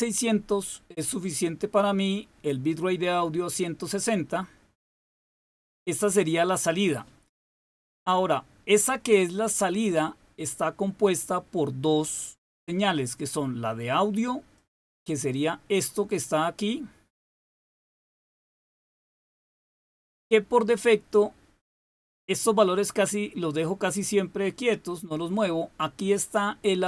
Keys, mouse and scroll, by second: 14.4 click.